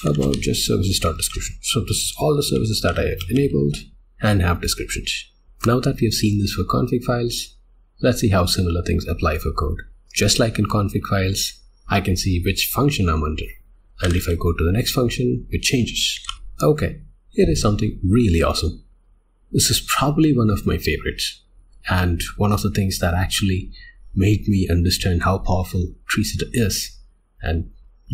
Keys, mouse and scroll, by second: 5.4 k, 16.3 click.